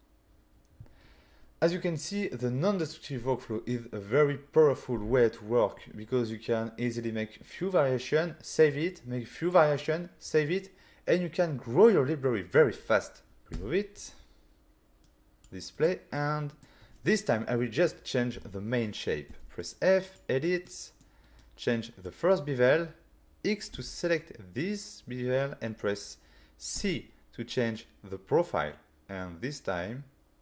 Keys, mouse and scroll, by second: 13.4 click, 13.4 middle click, 13.4 typing, 13.5 Delete, 15.2 click, 15.7 click, 16.2 middle click, 19.3 f, 20.1 click, 20.7 middle click, 21.4 click, 23.7 x.